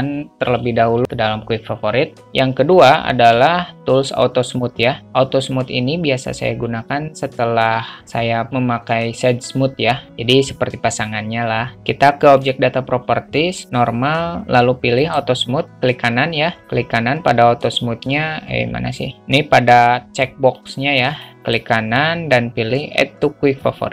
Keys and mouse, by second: 2.2 n, 3.5 q, 12.6 click, 15.3-16.6 right drag, 16.9-19.2 right drag, 20.9 click, 21.7-23.9 right drag.